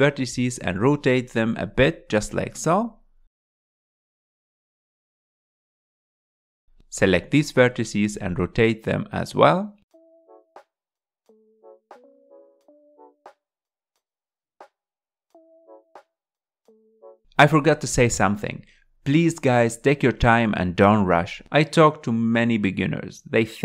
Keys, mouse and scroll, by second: 0.5 r, 1.2 s, 3.2 r, 5.5 click, 7.7 s, 9.7 click, 11.7 s, 15.4 r, 17.0 s, 19.6 g.